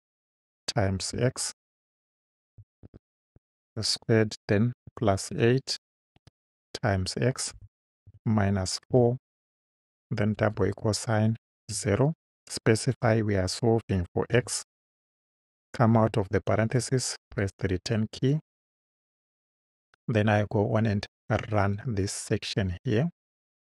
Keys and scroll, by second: 0.3 *, 1.1 x, 2.8-6.1 typing, 7.6 x, 8.1 -, 8.9 4, 10.2 =, 11.8 0, 13.0 ,, 14.4 x, 15.9 Right, 17.3 Return.